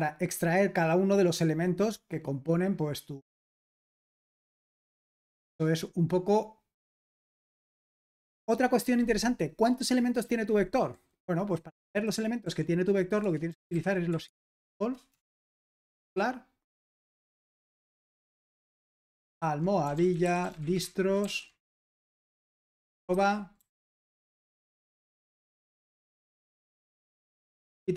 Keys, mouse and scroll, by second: 0.0-2.0 scroll down 2, 2.0-4.0 scroll down 1, 4.4-5.2 scroll down 2, 5.2 scroll down 1, 5.3-6.3 scroll up 2, 6.3-7.5 scroll down 1, 7.7-12.6 scroll up 1, 12.6-15.6 typing, 16.7-17.2 typing, 19.1-26.7 typing, 27.0 ctrl+p, 27.4 Return.